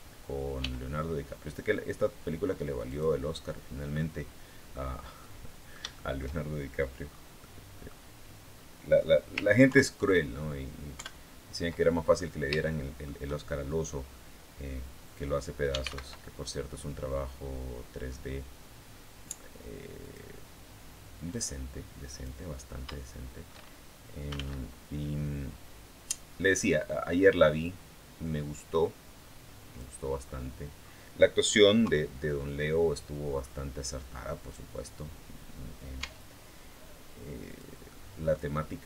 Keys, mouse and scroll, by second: 0.4 g, 2.7 click, 3.1 scroll down 1, 3.7 middle click, 5.0-6.2 middle drag, 6.8 scroll down 1, 7.2 middle click, 9.4 ctrl+KP_3, 10.7 ctrl+KP_1, 11.9-12.4 ctrl+scroll up 4, 12.4 shift+middle click, 15.2-16.1 typing, 19.8 click, 21.1 click, 22.3 scroll down 1, 23.8-24.7 typing, 26.3 click, 27.4-29.8 drag, 30.0-30.4 scroll up 1, 30.6 scroll down 1, 31.6 KP_3, 33.2-33.6 scroll up 2, 35.8 Tab, 37.2 click, 37.6 middle click, 38.6 right click.